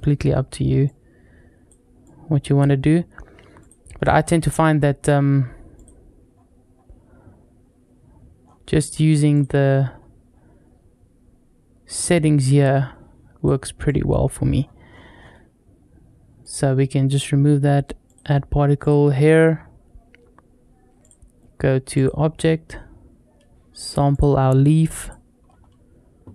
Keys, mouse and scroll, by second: 0.7 click, 1.9 click, 3.4 click, 4.8-5.6 scroll up 2, 5.6 click, 6.1-8.2 scroll down 3, 8.2 scroll up 2, 9.2 click, 9.8-10.7 scroll down 3, 11.0-11.6 scroll down 2, 12.3-13.3 drag, 13.7 click, 14.4-16.2 scroll up 5, 16.2 click, 17.9 click, 18.6 click, 20.8-21.9 drag, 22.5-23.9 scroll down 1, 23.9 click, 25.3-25.6 scroll up 2.